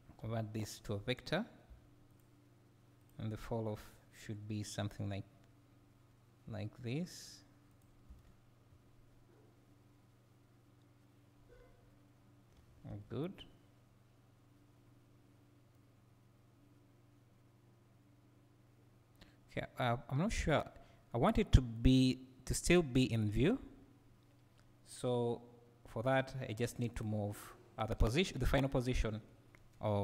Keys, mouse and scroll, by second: 2.2 v, 3.0 click, 3.7 g, 7.8 click, 8.0 space, 12.9 Escape, 15.8-25.0 right drag, 20.8-21.8 scroll down 2, 25.0 drag.